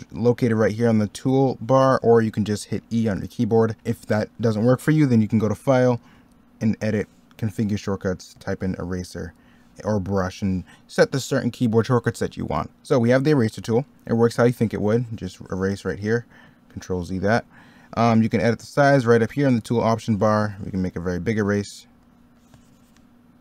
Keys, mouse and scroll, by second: 2.7 middle click, 10.6 middle click, 12.7 e, 16.3 ctrl+z, 20.7 ctrl+z.